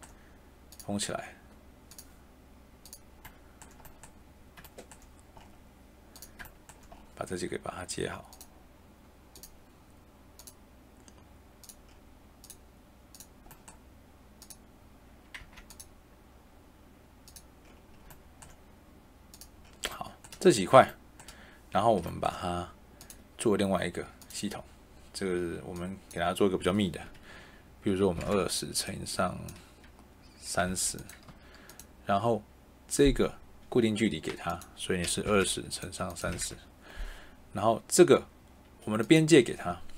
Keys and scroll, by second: 15.3 Tab, 28.1 2, 28.2 0, 30.6 3, 31.2 BackSpace, 35.2 2, 35.3 0, 36.1 3, 36.3 0.